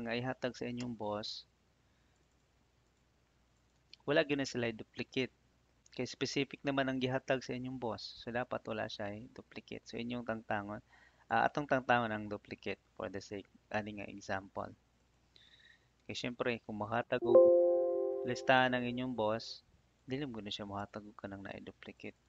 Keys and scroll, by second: 0.7 Return.